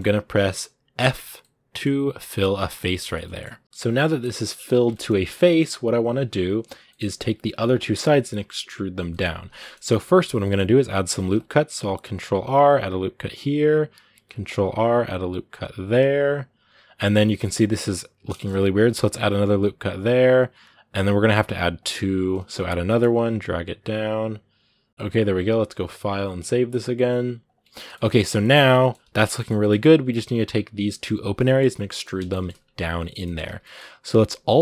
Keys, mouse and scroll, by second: 0.8 f, 1.2-4.4 middle drag, 4.4 scroll up 2, 4.7 middle click, 5.1 scroll down 2, 5.2-11.0 middle drag, 11.0 ctrl+r, 13.9 ctrl+r, 16.6-17.0 scroll down 6, 17.0-18.5 middle drag, 18.5 ctrl+r, 24.9 scroll up 2, 27.5 shift+middle click, 27.8 scroll up 1, 28.0-32.3 middle drag, 32.3 scroll up 2, 32.6 Tab, 32.9-34.6 shift+middle drag.